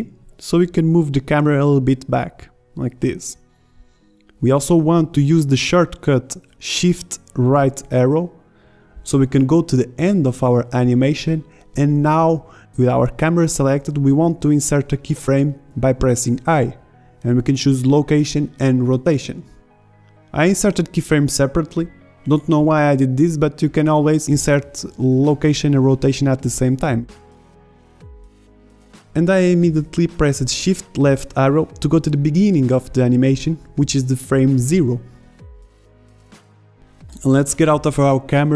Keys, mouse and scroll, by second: 0.0 g, 11.4 shift+Right, 17.0 i, 22.6 i, 33.0 shift+Left.